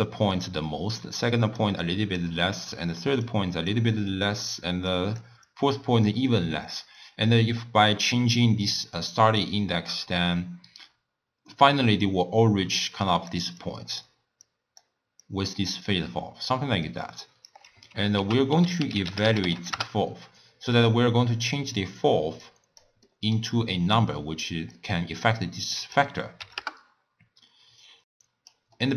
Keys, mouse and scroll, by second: 0.0-8.1 typing, 0.0-0.4 drag, 1.3 click, 1.9 click, 2.8 click, 3.3 click, 4.9 click, 5.5-6.1 drag, 8.6 click, 9.6-17.5 typing, 12.8 click, 13.1 click, 13.6-14.0 drag, 14.4 click, 15.3 click, 18.2 ctrl+a, 21.4 click, 22.4 click, 23.1-24.8 middle drag, 24.8-28.8 drag, 28.8-28.9 middle drag.